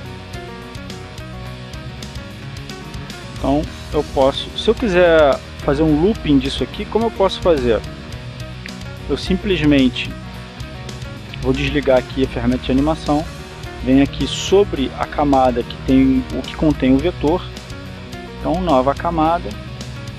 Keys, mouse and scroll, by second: 0.0 click, 2.0 click, 3.1-11.1 drag, 12.9 click, 14.5 click, 18.8-20.1 right drag.